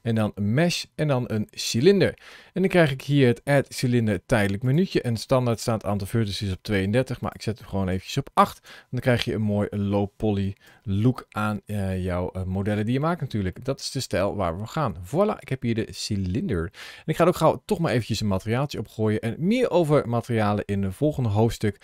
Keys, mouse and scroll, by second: 3.3 click, 4.5 click, 5.4 click, 7.2 click, 10.5 KP_Decimal, 11.3 scroll down 2, 11.9 middle click, 12.9-13.3 scroll down 3, 13.5 middle click, 17.9 click.